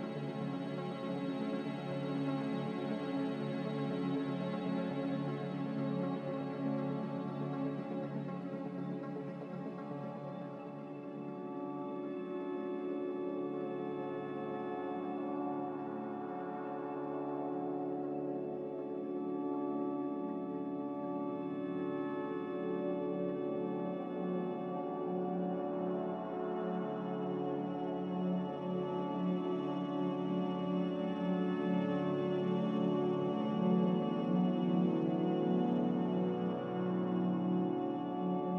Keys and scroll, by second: 3.7 z, 6.1-7.0 typing, 15.5-16.3 typing, 29.2-29.8 typing.